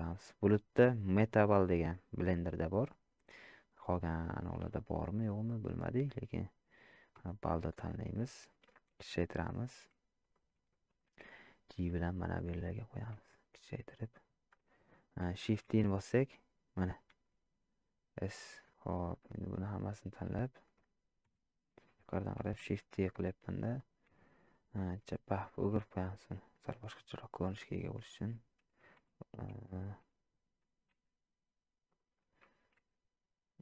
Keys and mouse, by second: 10.9 g, 13.2 s, 15.5 shift+d, 17.1 s, 19.4 click, 19.8-20.5 middle drag, 22.6 shift+d, 24.9 r, 26.8-28.1 middle drag, 30.9 g, 32.8 r.